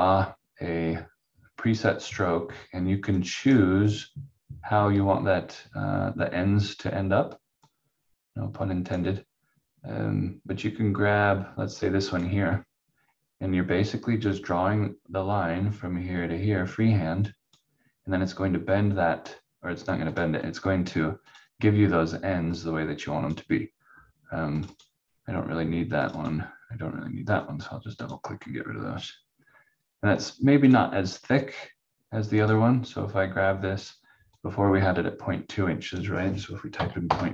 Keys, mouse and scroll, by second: 7.6 click, 12.1 click, 36.7 2, 37.1 Return.